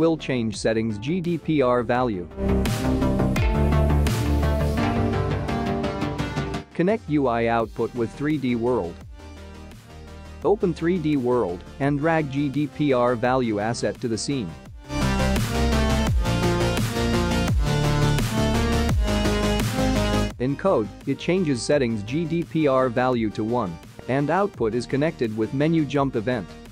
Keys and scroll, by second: 4.1 space.